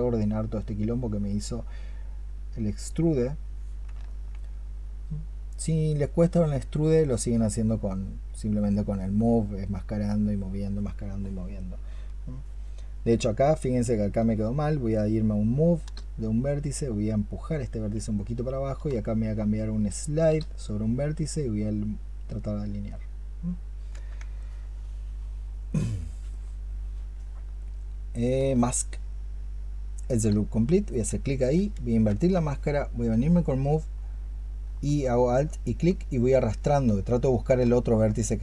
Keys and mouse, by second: 3.9 alt+click, 14.2-20.2 space, 23.7 space, 24.2 alt+click, 28.3-30.0 space, 31.7 ctrl+click, 34.9 alt+click.